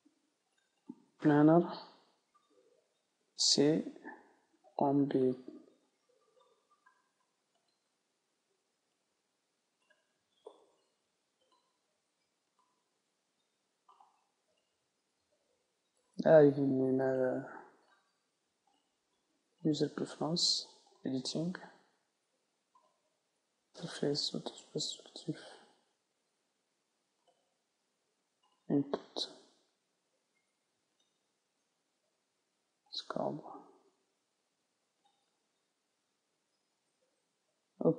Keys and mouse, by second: 0.9-2.7 right drag, 2.7 middle click, 3.3 c, 14.1-15.9 right drag, 14.6-16.1 middle drag, 18.7-20.5 drag, 36.3-37.9 middle drag.